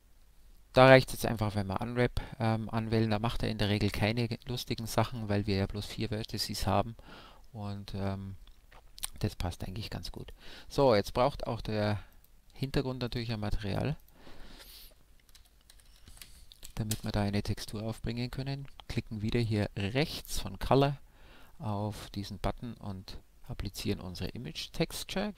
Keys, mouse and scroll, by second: 1.2 a, 2.0 Tab, 2.6-10.1 middle drag, 10.1-11.9 right drag, 12.1-15.8 drag, 19.1 m, 20.6-22.4 drag, 25.3 click.